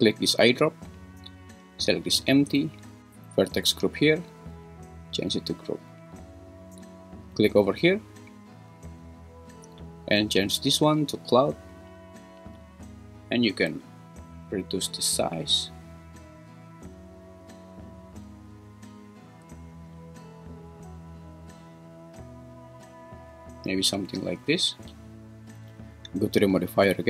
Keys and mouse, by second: 4.3-5.3 drag, 10.4-11.5 drag, 13.9-19.2 shift+drag, 20.0-23.1 drag, 26.6 click.